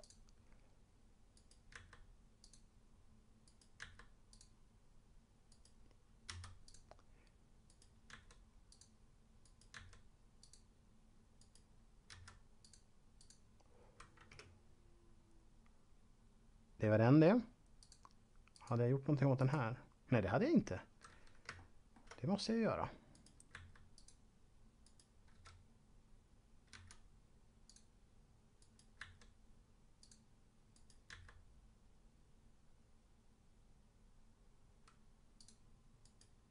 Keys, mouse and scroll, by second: 1.3 right click, 1.6 s, 2.4 click, 3.4 right click, 3.8 s, 4.3 click, 5.4 right click, 6.3 v, 6.6 click, 7.6 right click, 8.1 s, 8.6 click, 9.4 right click, 9.6 s, 10.4 click, 11.4 right click, 12.1 v, 12.6 click, 13.1 click, 17.8 click, 21.4 shift+middle click, 23.1 right click, 23.5 s, 23.9 click, 24.8 right click, 25.3 v, 27.6 click, 28.6 right click, 28.9 s, 29.9 click, 30.6 right click, 31.1 s, 35.4 click, 35.9 right click.